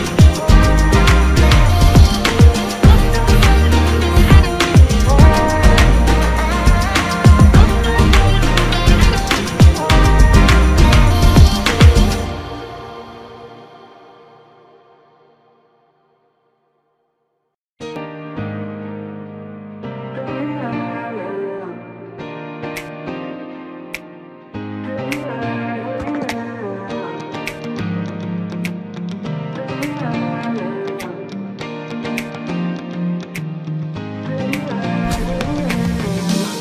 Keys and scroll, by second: 4.3 ctrl+x, 7.2 ctrl+f, 9.5 ctrl+c, 13.1 ctrl+f, 33.9 ctrl+x, 34.3 ctrl+f.